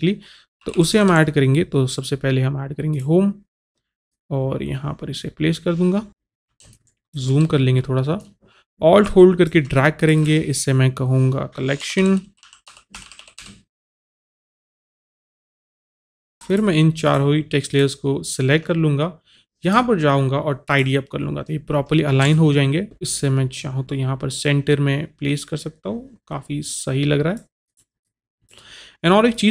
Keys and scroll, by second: 0.8 typing, 11.8-14.4 typing, 15.7-16.3 typing.